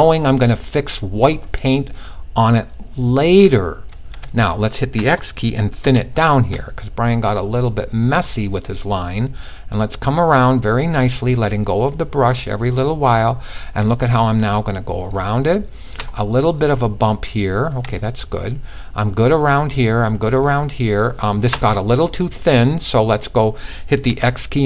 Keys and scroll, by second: 5.3 x, 23.5 x.